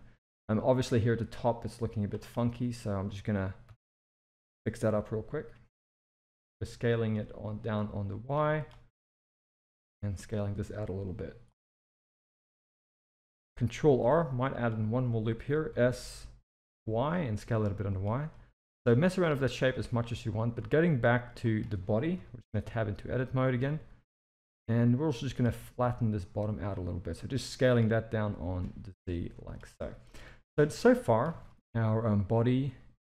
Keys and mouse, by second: 0.3 z, 1.3 click, 3.7 s, 8.9 click, 9.9 s, 11.7 z, 13.8 ctrl+r, 15.7 s, 18.3-19.7 middle drag, 19.8 Tab, 20.5-21.2 middle drag, 21.5 click, 22.1 KP_1, 22.6 Tab, 23.1 shift+middle click, 23.7 z, 24.6 click, 25.5 s, 28.2 g, 29.8 z, 30.6 Tab, 30.8-31.2 middle drag, 31.3 alt+a, 31.4-33.0 middle drag.